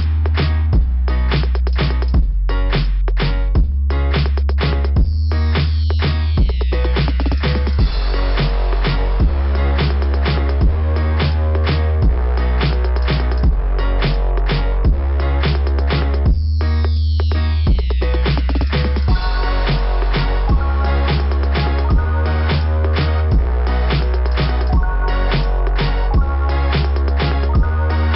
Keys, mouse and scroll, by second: 3.8 scroll up 2, 10.5 scroll down 2, 10.5 typing, 14.8 click, 19.4 click, 25.0 click, 25.3 click, 26.1 click, 26.4 click, 26.6 click.